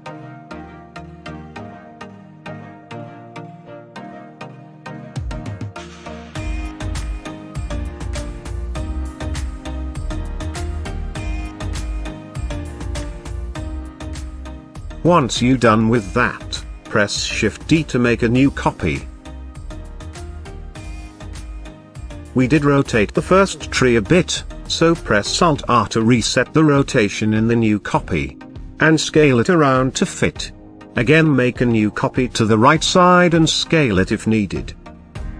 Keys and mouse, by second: 0.1 KP_0, 1.7 r, 1.9 z, 2.9 click, 3.3-3.8 middle drag, 4.1 middle click, 5.4 s, 8.1 click, 8.9 r, 9.2 x, 10.1 y, 12.0 click, 12.9-14.6 middle drag, 15.8-16.6 middle drag, 17.7 click, 19.4-19.7 shift+middle drag, 20.5 shift+d, 22.3 shift+z, 23.6 click, 25.0 alt+r, 26.3 r, 26.5 z, 27.5 click, 27.8 s, 28.9 drag, 30.5 shift+middle drag, 31.5 shift+d, 31.7 shift+z, 33.1 click, 33.5 shift+drag, 34.3 s, 34.8 click.